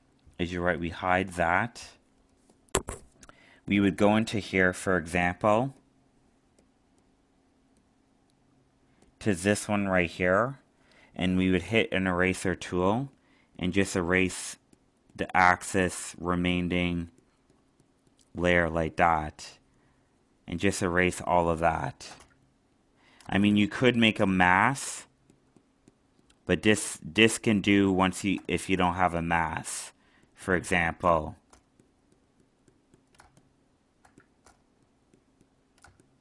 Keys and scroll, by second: 21.3 alt+space, 27.8 alt+space, 33.2 alt+space.